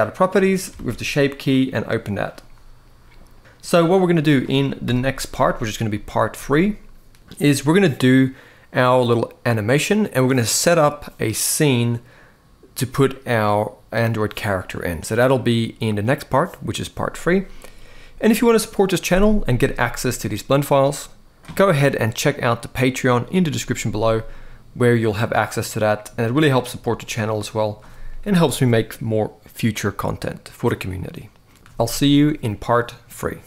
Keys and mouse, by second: 0.5 alt+a, 1.3 click, 3.4 click, 3.9 middle click, 4.6 KP_1, 5.6-6.0 shift+middle drag, 24.0-25.8 middle drag, 26.3-27.2 middle drag.